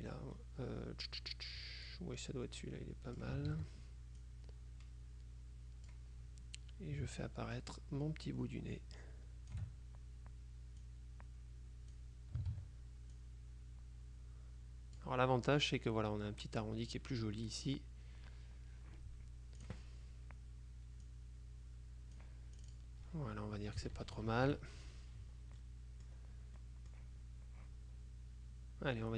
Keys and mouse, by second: 2.0-3.8 drag, 3.6 ctrl+z, 4.3-6.5 drag, 7.2-10.1 ctrl+shift+drag, 10.9-12.6 drag, 12.6 ctrl+z, 13.2-15.6 drag, 19.7 click, 21.2-23.3 drag, 23.9 KP_Subtract, 25.7 click.